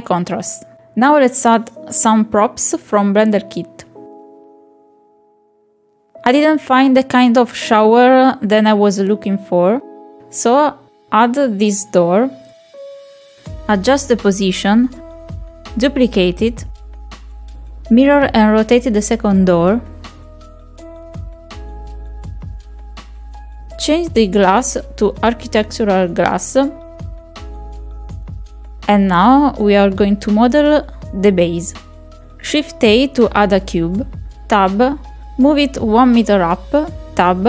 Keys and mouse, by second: 1.1 middle click, 1.5 shift+middle click, 3.8 click, 6.4-7.4 middle drag, 8.7-10.8 drag, 10.8 shift+middle click, 11.1 middle click, 13.9 r, 15.3 ctrl+click, 16.5 middle click, 16.7 KP_Decimal, 16.9 right click, 19.4 click, 21.0-22.0 drag, 22.7 click, 23.0 r, 23.9 ctrl+click, 24.2 KP_7, 24.5 ctrl+click, 25.0 click, 25.5 click, 27.5 click, 28.5 click, 32.3 middle click, 33.6 shift+a, 36.1 Tab, 36.1 click.